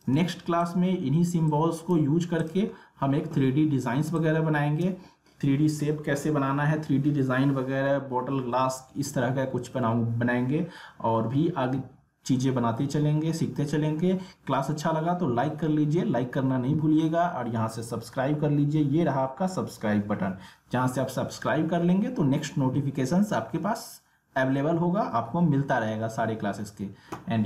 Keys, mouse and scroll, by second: 2.7 alt+scroll up 1, 3.4 alt+scroll down 1, 4.1 space, 4.2 click, 4.6 space.